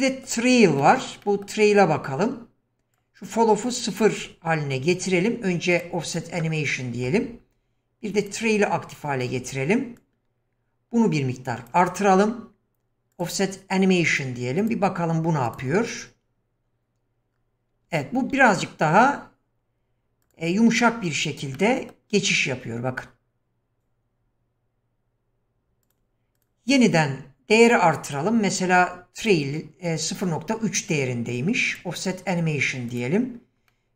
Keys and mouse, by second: 0.8 shift+drag, 1.2 middle click, 3.0 click, 5.7 click, 6.7-7.1 middle drag, 8.2 click, 10.0-11.7 drag, 13.1 click, 14.6 click, 15.6 click, 18.5-18.9 middle drag, 20.3 click, 21.6-22.0 middle drag, 23.8 click, 25.8 click, 26.4 click, 27.7-29.3 drag, 31.7 click, 32.9 click, 33.7-33.9 shift+middle drag.